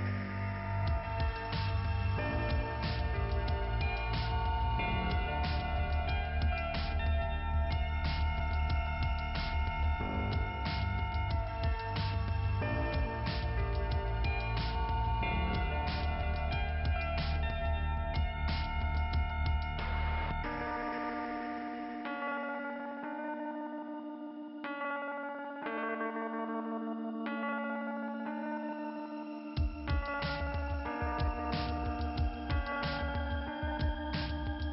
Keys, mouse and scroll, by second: 0.4 click, 1.7 click, 4.1 click, 5.6 click, 6.5 scroll down 2, 9.2 click, 9.9 click, 21.6 click, 22.2 click, 22.7 scroll down 2, 23.7 middle click, 23.9 middle click, 24.5 click, 26.4 click, 27.0 click, 27.9 click, 28.4 scroll down 2, 29.0-29.5 scroll up 1, 29.6 scroll up 1, 31.8 click.